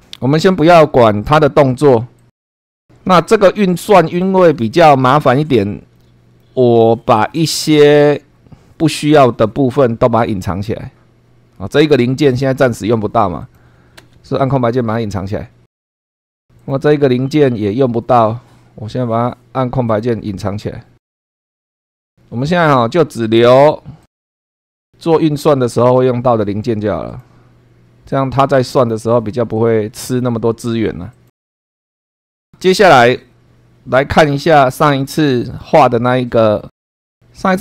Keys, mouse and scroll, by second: 2.1 click, 2.6 scroll down 1, 3.3 shift+middle click, 4.3 shift+scroll up 3, 5.9 middle click, 6.9 shift+middle click, 7.6 shift+scroll down 3, 9.5 scroll down 2, 10.0-10.3 scroll up 2, 10.5 scroll down 1, 11.7 click, 13.4 click, 14.0 space, 16.0 click, 16.6 click, 17.7 scroll up 1, 18.3 scroll up 1, 19.8 click, 20.3 space, 21.0 scroll up 2, 21.7 click, 23.5 click, 24.0 click, 24.2 space, 24.4 click, 24.6 space, 24.9 scroll down 1, 25.8 middle click, 27.1 click, 29.5 click, 29.9 space, 31.1 click, 31.4 click, 31.5 space, 31.5 scroll down 2, 31.6 shift+middle click, 31.8 scroll up 2, 31.9 shift+middle click, 32.1 shift+middle click, 34.2 click, 35.4 click, 35.9 scroll up 2, 36.8 click, 37.1 click.